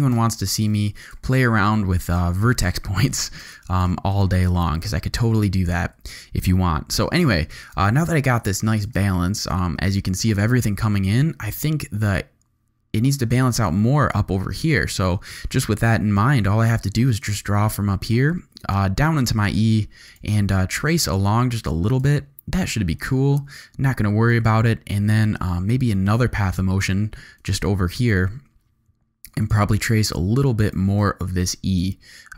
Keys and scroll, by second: 0.1 space, 0.7 z, 1.4 alt+space, 2.2 z, 3.4 alt+space, 4.0 z, 4.5 space, 5.9 v, 7.3 z, 8.2 alt+space, 9.2 space, 10.8 z, 15.8 g, 22.6 v, 24.3 g.